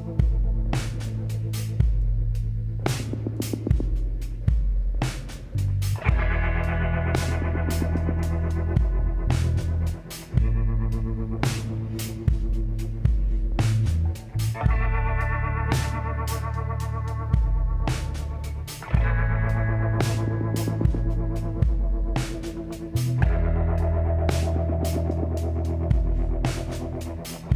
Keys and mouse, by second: 0.3-2.0 middle drag, 4.0-5.8 drag, 5.8-7.6 middle drag, 7.6 click, 8.2-9.3 middle drag, 10.0 middle click, 11.1-12.1 drag, 12.1 shift+s, 15.9-18.3 drag, 17.4 l, 18.4 KP_1, 19.2 click, 22.9 shift+d, 24.6 r.